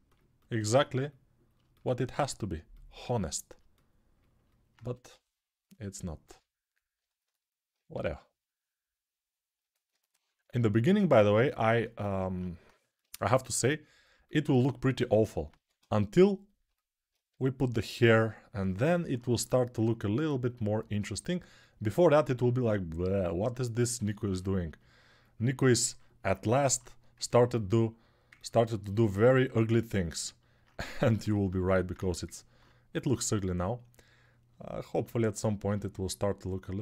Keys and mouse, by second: 4.6 1, 7.7 2, 12.9 3, 15.6 1, 17.1 g, 31.4 g.